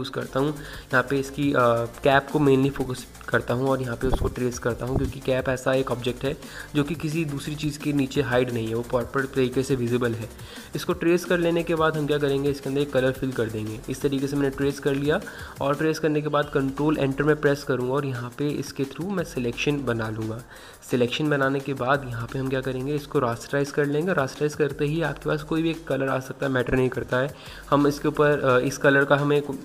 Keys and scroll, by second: 19.5 ctrl+Return.